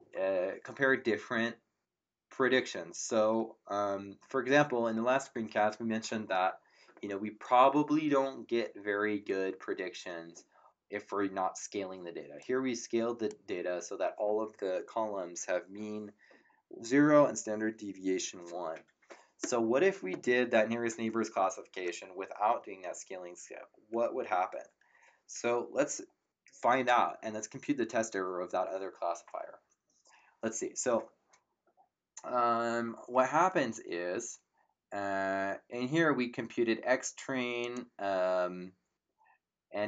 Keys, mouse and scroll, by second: 12.4 click, 37.6 click.